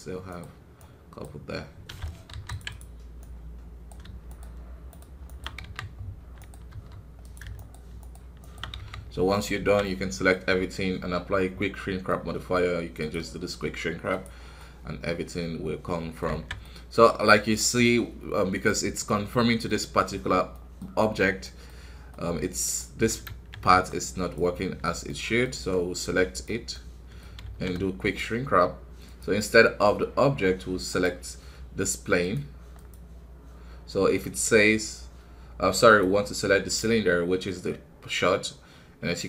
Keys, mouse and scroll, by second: 0.2-2.3 right drag, 2.3 ctrl+r, 3.2-5.6 right drag, 5.6 f, 6.3 right click, 6.7 f, 7.5-8.7 shift+right drag, 8.7 f, 9.0 scroll down 1, 9.3 middle click, 9.5 a, 9.8 middle click, 10.3 scroll up 1, 12.0-16.3 middle drag, 16.3 alt+a, 16.6 middle click, 17.2 scroll up 2, 17.5-19.0 middle drag, 19.0-19.3 scroll down 2, 19.3-21.7 middle drag, 21.7-22.7 scroll up 1, 22.7 middle click, 23.2 shift+z, 23.8 click, 25.0 middle click, 25.6-27.4 drag, 27.4 shift+z, 28.0-31.0 drag.